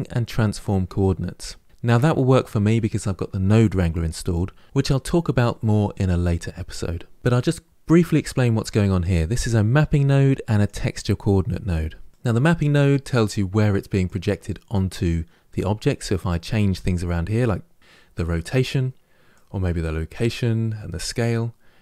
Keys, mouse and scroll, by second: 10.5 click, 12.1 click, 14.0-16.9 drag, 19.3-21.8 drag.